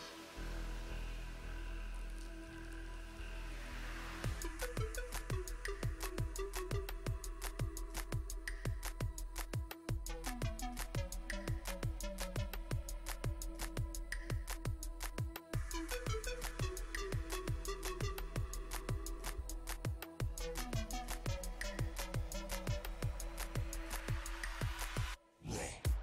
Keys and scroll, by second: 10.3 s, 25.2 z.